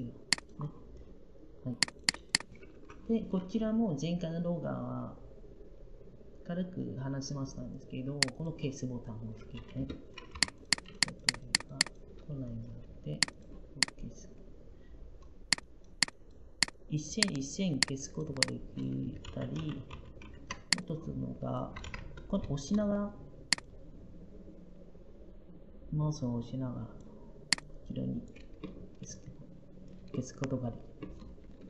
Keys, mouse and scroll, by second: 2.6 Delete, 10.2 i.